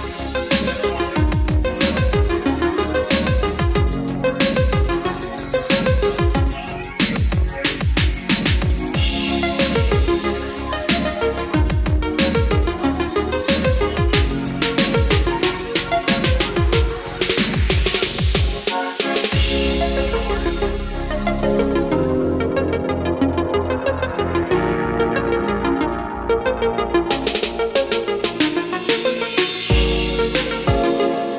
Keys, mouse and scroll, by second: 1.5-16.8 drag, 18.4 scroll down 1, 22.3 scroll up 1, 23.4-23.8 scroll down 1, 27.9-28.6 scroll up 1, 30.3-31.3 scroll down 1.